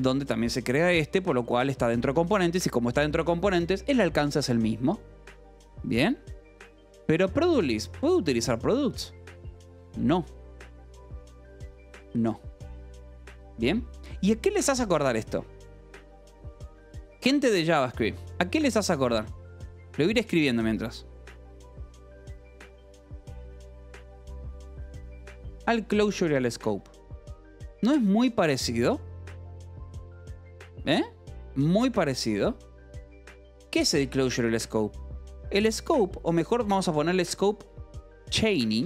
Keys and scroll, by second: 0.4 shift+v, 0.8 Escape, 2.1 shift+v, 6.8 j, 7.6 shift+v, 7.8 Escape, 8.0 k, 8.9 shift+v, 13.8 Escape, 17.3 k, 18.0 a, 20.2 Return, 20.6-25.1 typing, 25.5 Escape, 27.4 k, 28.2 shift+v, 33.6 Escape, 35.6 l, 36.6-38.8 typing.